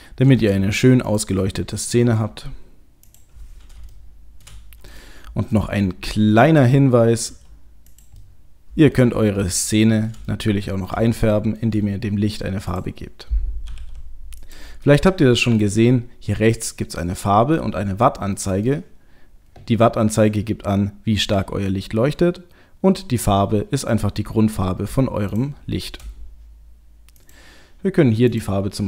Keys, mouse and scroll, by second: 0.3 shift+d, 1.3 middle click, 2.0 shift+d, 3.9 shift+middle click, 5.0 middle click, 5.6 g, 6.8 middle click, 7.3 g, 8.2 middle click, 9.4 shift+middle click, 10.3 middle click, 11.1 shift+middle click, 12.7 click, 13.7 g, 14.4 click, 14.9 middle click, 16.8 middle click, 17.5 middle click, 17.8-18.4 scroll down 1, 18.4 middle click, 20.8 middle click, 25.3 shift+click, 25.4 shift+click, 27.1 click, 28.3 click.